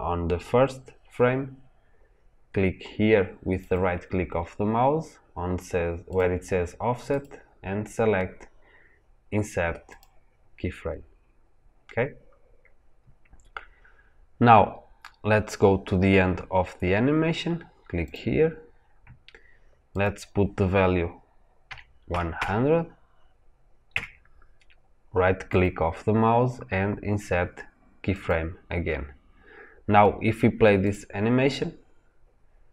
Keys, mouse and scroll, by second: 9.9-18.0 right drag, 18.0-23.8 drag, 23.8 KP_0, 23.9 KP_Enter, 28.2-30.8 right drag, 30.8 click.